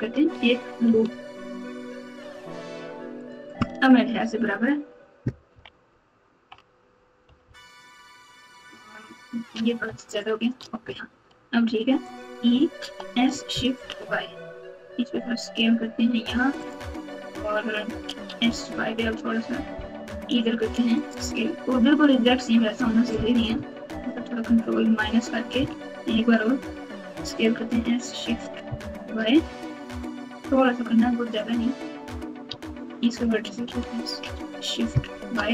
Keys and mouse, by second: 2.2 alt+shift+click, 5.5 KP_Subtract, 5.8-6.4 ctrl+KP_2, 7.2 KP_Subtract, 7.4 KP_Subtract, 10.0 alt+shift+click, 11.5 e, 12.8 s, 18.1 s, 24.1 ctrl+KP_Subtract, 27.0 s, 32.4 1, 33.5 s.